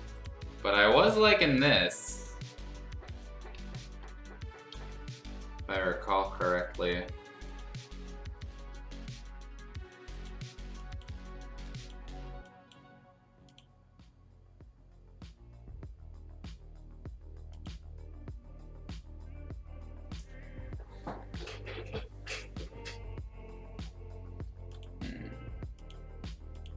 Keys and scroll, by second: 0.0 [.